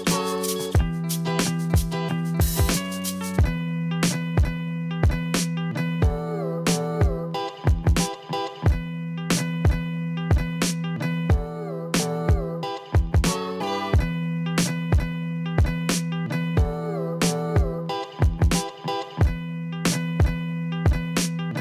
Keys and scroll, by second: 10.8 Delete.